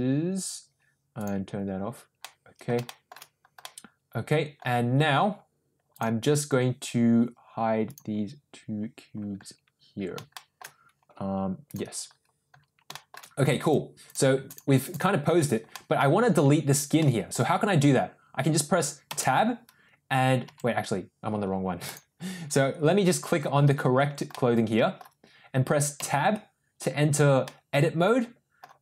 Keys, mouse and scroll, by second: 1.1 click, 2.2 middle click, 2.8 shift+middle click, 3.6-4.6 middle drag, 7.8 click, 10.2 shift+middle click, 11.6 click, 12.8 shift+middle drag, 13.5 click, 14.0 click, 14.4 click, 14.8 click, 15.6 middle click, 16.9 middle click, 19.2 Tab, 20.6 Tab, 21.8 click, 24.2-24.9 middle drag, 25.9 Tab, 27.3-28.5 middle drag.